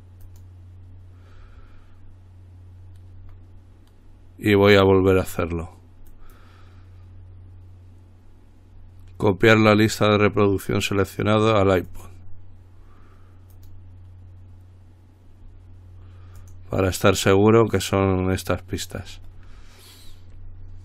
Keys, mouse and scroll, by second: 0.5 click, 5.1 click, 6.3 right click, 12.1 click, 13.7 click, 16.6 click.